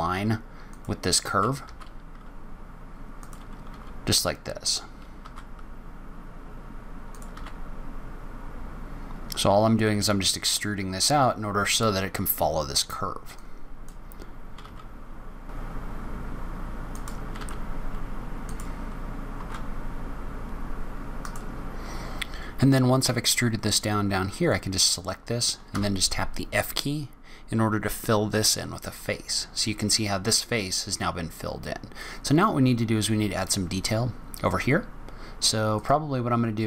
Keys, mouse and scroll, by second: 1.5 r, 3.6 s, 5.1 e, 7.2 r, 10.9 scroll down 1, 11.2-12.0 scroll up 2, 13.2 click, 14.5 s, 15.6-20.3 typing, 15.8 click, 16.3 click, 23.7 click, 25.6 f, 35.6 click.